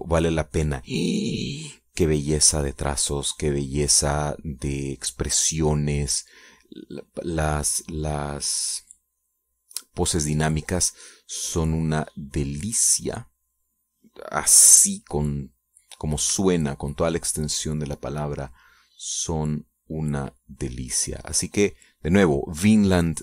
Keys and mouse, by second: 3.6-7.9 drag, 8.0-15.6 drag, 15.9 click, 17.7-18.8 shift+drag, 19.1-23.2 shift+drag.